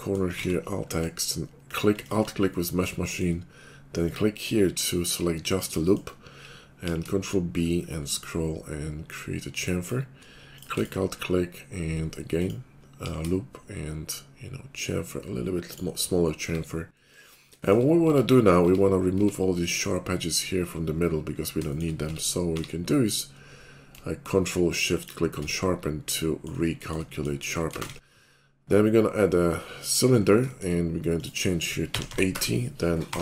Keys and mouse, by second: 0.4 alt+x, 4.0 click, 6.9 ctrl+b, 12.4 click, 13.1 ctrl+b, 16.4 Tab, 18.0 Tab, 18.6 Tab, 19.1 Tab, 20.6-21.9 middle drag, 22.0 Tab, 22.5 q, 23.5 shift+middle click, 25.6-27.7 middle drag, 27.7 shift+click, 27.8 shift+a, 27.9-30.4 middle drag, 30.4 shift+click, 30.7 middle click, 31.2-33.2 drag, 33.1 r.